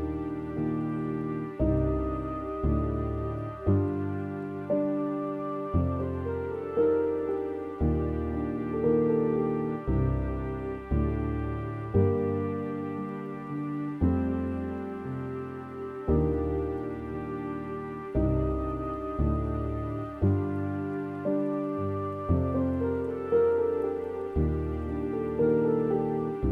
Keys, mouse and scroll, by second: 1.0-2.1 middle drag, 2.1 scroll down 2, 2.7 scroll up 2, 3.5 middle click, 4.1-4.9 scroll down 3, 4.9 click, 5.2-5.5 scroll up 6, 5.8-6.3 scroll down 2, 6.3-8.2 middle drag, 8.3-8.8 scroll down 5, 8.8-11.2 middle drag, 11.2-11.5 scroll up 2, 12.8 scroll up 2, 18.5 scroll down 4, 19.7 a, 20.7-22.0 scroll up 7, 22.0 scroll down 3, 24.1-25.5 drag, 25.5-26.1 scroll up 2.